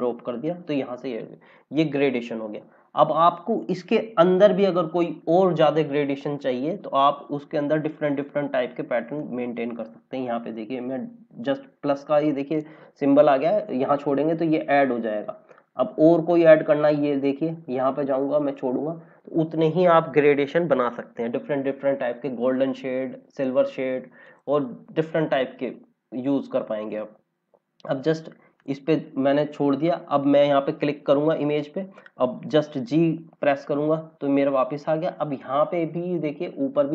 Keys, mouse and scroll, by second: 1.4 scroll down 1, 2.5 scroll up 1, 5.7-6.0 scroll up 1, 9.1 click, 16.2 click, 19.3 scroll down 1, 24.2 click, 25.4 scroll down 1, 28.0 click, 32.8 g.